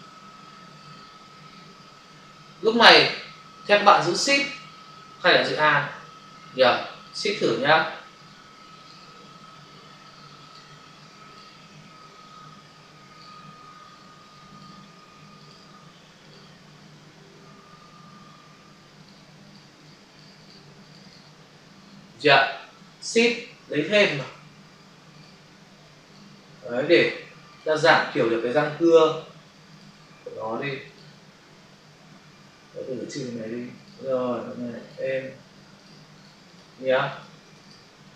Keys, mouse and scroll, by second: 6.9 shift+click, 7.1 shift+click, 8.7 click, 8.8 click, 10.3 click, 10.5 click, 11.2 double click, 13.0 click, 13.2 click, 14.4 click, 14.6 click, 15.3 click, 15.4 click, 16.1 click, 16.3 double click, 18.9 click, 19.4 click, 19.5 double click, 19.6 click, 19.8 click, 19.9 click, 20.1 double click, 20.2 click, 20.4 click, 20.7 click, 21.0 click, 23.9 shift+click, 24.1 shift+click, 25.0 click, 25.3 click, 29.7 click, 30.8 click, 30.9 click, 32.7 Delete, 33.7 click, 33.9 click, 34.7 click, 34.8 click, 36.4 double click, 37.0 click, 37.2 click, 37.5 click, 37.6 click.